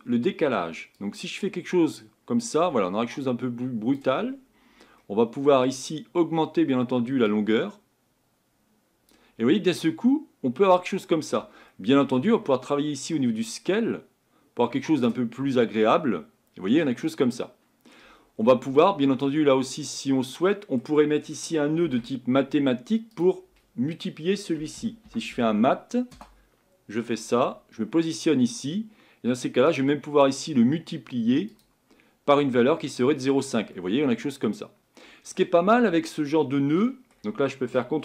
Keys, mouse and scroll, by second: 1.1-4.0 drag, 7.4-9.4 drag, 9.4-9.8 scroll down 1, 9.8-13.3 middle drag, 13.3-15.5 drag, 15.5-18.0 middle drag, 18.0-18.4 scroll up 1, 18.4 scroll down 4, 20.3-22.0 scroll down 1, 22.0-22.9 scroll down 1, 22.9-24.0 scroll down 1, 24.0-26.1 scroll down 1, 31.6-33.4 drag, 33.4-33.8 scroll down 3, 33.8-38.0 middle drag.